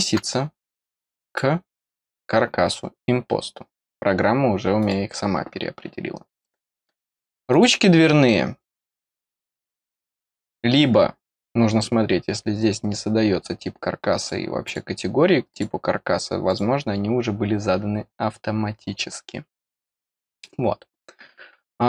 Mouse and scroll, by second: 1.2 click, 4.8 click, 5.5-6.4 scroll down 1, 6.4 middle click, 7.5 click, 9.1 middle click, 9.4 middle click, 12.7-14.2 scroll up 2, 14.2 click, 14.6 click, 15.5 click, 16.5 click, 21.0-21.6 scroll down 1.